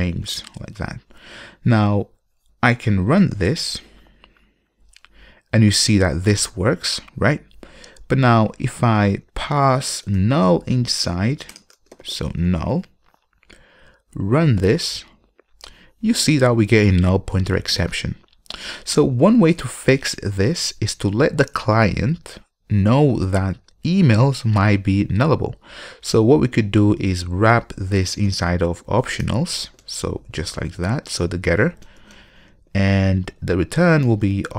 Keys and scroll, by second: 3.6 ctrl+F5, 9.3 super+w, 14.4 ctrl+F5, 29.4 Return.